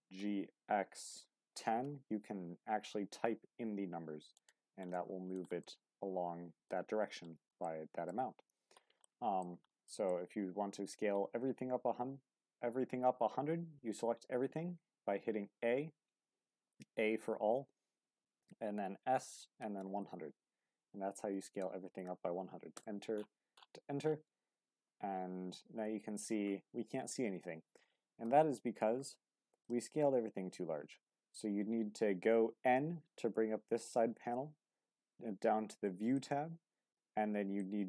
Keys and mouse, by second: 0.1 g, 1.1 x, 1.4 KP_1, 1.8 KP_0, 4.3 click, 5.0-5.4 middle drag, 5.6-6.7 middle drag, 7.7-8.1 middle drag, 9.0-9.4 shift+middle drag, 9.8 shift+middle drag, 14.0 a, 17.6 s, 18.3 KP_1, 19.6 KP_0, 22.7 Return, 24.7 q, 28.2 n, 29.6-31.3 drag, 36.2-37.8 drag.